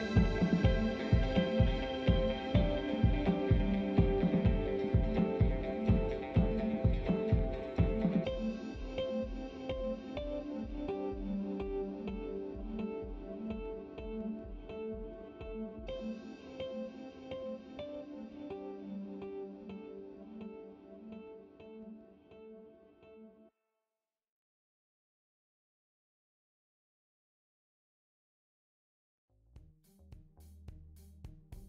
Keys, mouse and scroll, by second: 4.0-5.1 scroll down 2, 5.1-7.9 drag, 8.9-9.8 scroll down 2, 10.0-12.2 scroll down 2, 12.4 click, 13.0 shift+click, 13.4 shift+click, 14.7 ctrl+l, 19.2 click, 19.9 shift+click, 20.7 ctrl+l, 25.7 click, 27.2 click, 28.7 click.